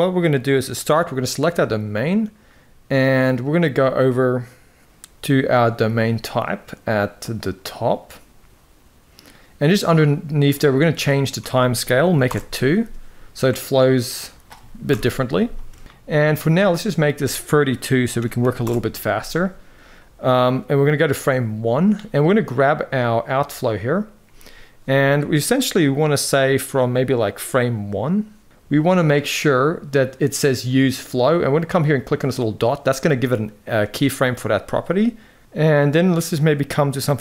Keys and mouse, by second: 10.3-12.0 drag, 14.7 shift+Left, 15.2 space, 15.8 middle click, 16.7-18.4 drag, 22.1 click, 36.4-37.2 drag.